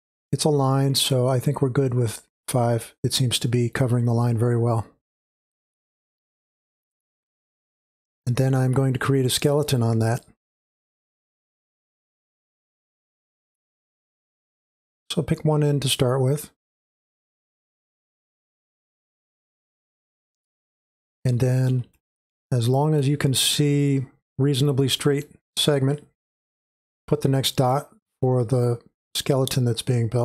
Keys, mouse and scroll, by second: 0.0-3.9 scroll up 2, 3.9-5.4 scroll down 2, 5.4-10.7 drag, 10.7-16.7 scroll up 2, 16.8-19.1 middle drag, 16.8-19.1 scroll up 2, 19.1-20.9 drag, 20.9-21.8 scroll down 2, 21.8 space, 21.9-30.2 drag.